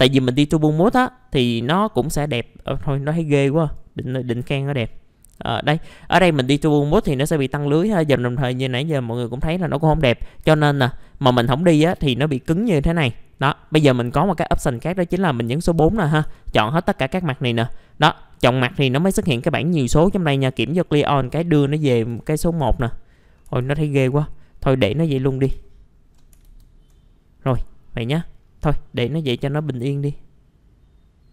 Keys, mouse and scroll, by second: 1.4 click, 3.6 right click, 4.2 click, 4.9 middle click, 5.3 scroll up 1, 6.9 F4, 10.3 scroll down 1, 10.4 F4, 10.9 scroll down 1, 11.7-13.1 scroll up 1, 13.1 middle click, 15.5 4, 16.2 ctrl+a, 16.9-20.4 scroll down 1, 20.4 click, 22.1 click, 23.6 ctrl+z, 24.5-25.1 scroll up 1, 25.1 middle click, 25.4 F4, 25.6-25.9 scroll up 1, 26.4 ctrl+z, 27.5 F4, 28.4 scroll down 1, 29.4-31.3 alt+middle drag.